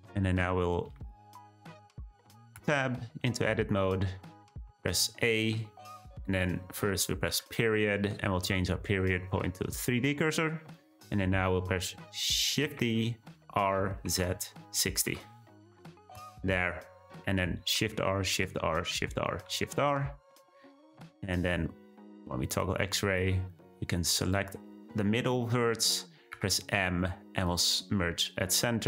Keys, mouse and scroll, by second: 0.9 `, 2.6 Tab, 4.7 a, 7.3 ., 12.6 shift+d, 17.7 shift+r, 18.3 shift+r, 18.9 shift+r, 19.5 shift+r, 20.5-21.5 scroll up 1, 21.5 z, 23.1 click, 25.4-26.3 scroll up 1, 26.3 m.